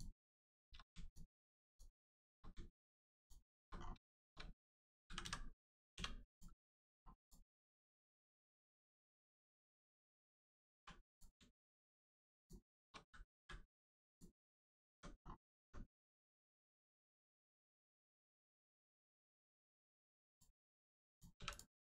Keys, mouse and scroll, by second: 1.7 shift+click, 2.0 shift+middle click, 3.2 shift+click, 3.8 scroll down 1, 4.1 shift+middle click, 4.6 middle click, 4.6 middle click, 5.2 x, 6.3 click, 6.6 middle click, 6.9 scroll up 1, 7.2 click, 7.6 middle click, 9.0 scroll up 1, 9.3 middle click, 10.7 scroll up 1, 10.8 1, 11.1 click, 12.4 shift+click, 14.1 click, 14.1 click, 14.5-14.9 scroll down 1, 15.6 Tab, 16.0 middle click, 16.8 shift+middle click, 17.2 middle click, 17.3 middle click, 19.7 shift+middle click, 20.3 click, 20.3 click.